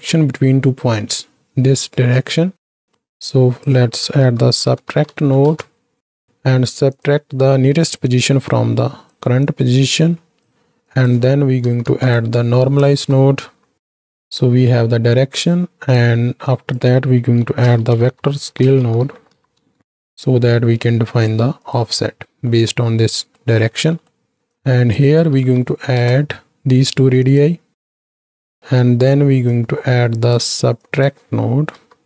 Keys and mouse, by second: 0.3 middle click, 2.6 middle click, 3.2-7.0 drag, 8.1-9.1 drag, 9.5-10.5 drag, 10.9-15.8 drag, 12.9 BackSpace, 16.4-21.7 drag, 22.0 middle click, 23.3 middle click, 23.9 middle click, 24.4-27.3 drag, 27.8 click, 28.8 middle click, 29.5 click, 30.7-32.0 drag.